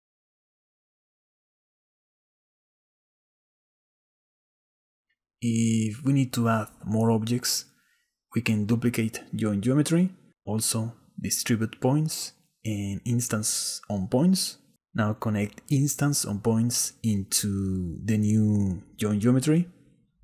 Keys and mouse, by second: 2.2 shift+click, 2.3 shift+middle click, 2.5-3.5 shift+right drag, 4.1 shift+right click, 4.5 shift+middle click, 6.2 click, 6.8 click, 7.2 click, 7.5 click, 8.5 shift+d, 9.7 click, 10.8 ctrl+click, 11.8 shift+click, 12.1 click, 13.2 shift+d, 15.2-16.3 drag, 16.8 click, 17.5 click.